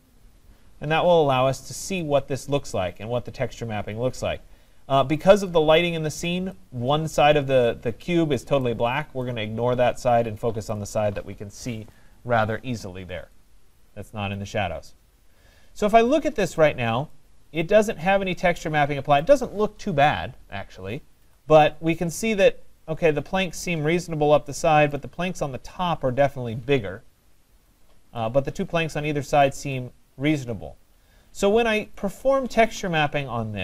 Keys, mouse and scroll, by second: 1.6 middle click, 1.7 middle click, 6.1 right click, 8.6 right click, 10.7 right click, 16.4 right click, 16.7 middle click, 19.2 right click, 21.4 middle click, 24.9 right click, 27.3 middle click, 27.4 middle click, 28.2 right click, 32.0 right click.